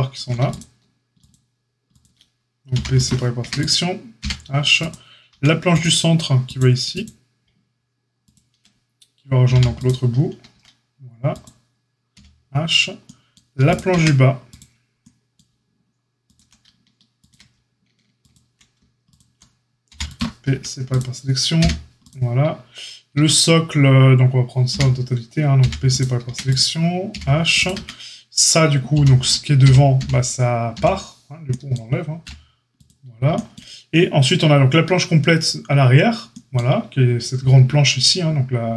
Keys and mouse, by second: 0.5-1.2 shift+drag, 1.2 shift+middle click, 1.8 shift+click, 1.9-3.5 shift+middle drag, 2.7 p, 3.3 Tab, 3.5 click, 3.6-5.6 middle drag, 4.2 h, 5.3 Tab, 5.6 click, 5.7 middle click, 6.5 click, 7.4-11.2 shift+middle drag, 9.4 p, 10.5 Tab, 11.2 click, 11.4-13.6 middle drag, 12.1 h, 13.6 click, 13.7-14.4 middle drag, 13.9 Tab, 14.4 click, 14.5-16.2 middle drag, 16.2 ctrl+click, 16.3-21.9 ctrl+shift+middle drag, 19.8 p, 20.4 Tab, 21.5 h, 21.9 click, 22.0-26.4 middle drag, 23.1 Tab, 24.6 l, 25.5 p, 26.2 Tab, 26.4 click, 26.5-27.6 middle drag, 27.1 h, 27.6 click, 27.7 Tab, 27.7-38.7 middle drag, 28.9 l, 29.6 l, 29.9 l, 30.7 l, 32.2 x.